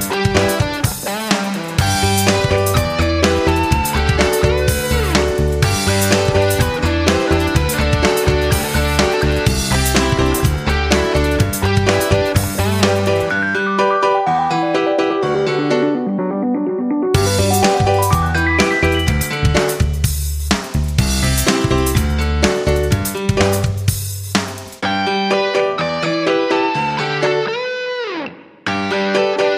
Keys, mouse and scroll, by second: 6.7 right click, 7.6 click, 13.8 scroll down 1, 15.1 click, 16.2 KP_1, 16.4 KP_0, 18.3 click, 22.0 KP_2, 22.3 KP_5, 25.6 click.